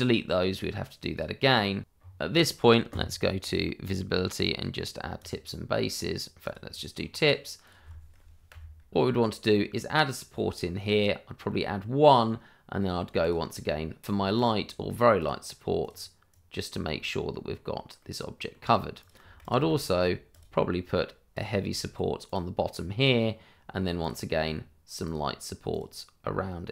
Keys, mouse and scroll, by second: 1.8 shift+middle click, 2.2 click, 2.3 scroll up 1, 2.6 right click, 2.9 middle click, 3.5 scroll up 1, 4.5 click, 6.9 scroll up 1, 7.6 click, 8.5 Delete, 10.9 click, 11.4 middle click, 13.2 click, 16.3 right click, 17.0 middle click, 19.2 Delete, 19.4 click, 19.5 Delete, 20.3 click, 21.6 Delete, 22.2 click, 22.7 middle click, 24.0 click.